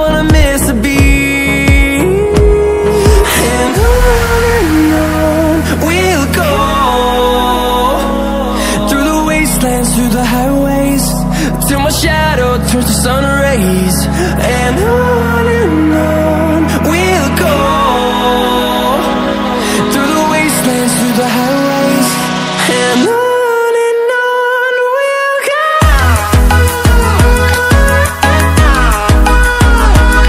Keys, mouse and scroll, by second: 7.2-11.7 alt+shift+drag, 19.3 ctrl+w, 25.7 ctrl+w, 26.4 click.